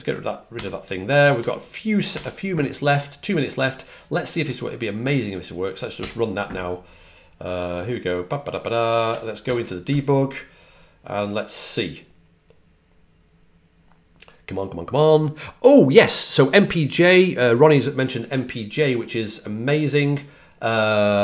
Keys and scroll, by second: 0.0-2.5 typing.